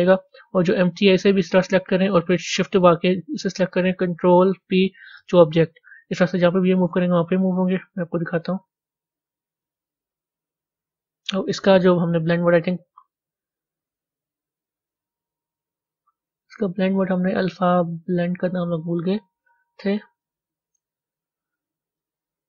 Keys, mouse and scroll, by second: 2.8 shift+click, 5.1 ctrl+p, 5.8 a, 6.3-8.2 middle drag, 8.2 z, 8.2 click, 9.7 click, 14.9-20.1 drag, 20.1 middle click, 20.9-21.3 scroll up 1, 21.3 scroll down 1, 21.9-22.4 middle drag.